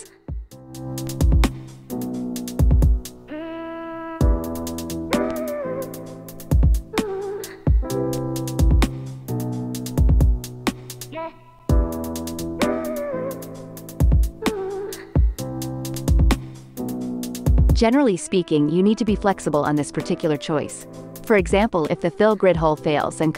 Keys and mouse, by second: 1.4 x, 4.2 ctrl+Tab, 4.8 click, 5.3 ctrl+Tab, 5.7-7.1 drag, 9.8-10.8 drag, 11.1 click, 11.5 ctrl+Tab, 11.8 click, 15.3 x, 16.9 ctrl+Tab, 17.4-22.6 drag, 23.1 ctrl+Tab.